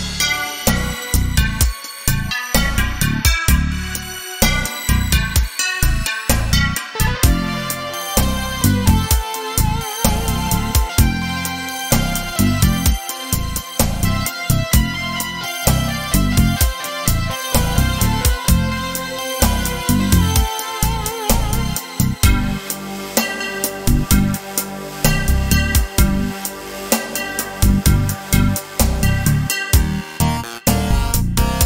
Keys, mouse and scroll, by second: 0.0-1.5 middle drag, 1.5-3.0 right drag, 3.0-4.3 middle drag, 4.3-6.4 right drag, 6.4-7.6 middle drag, 7.6-11.1 right drag, 10.2-10.9 scroll down 2, 11.1-14.2 middle drag, 11.8 Tab, 12.6 scroll down 2, 14.2-19.7 drag, 27.4-28.9 right drag, 28.8-31.2 drag.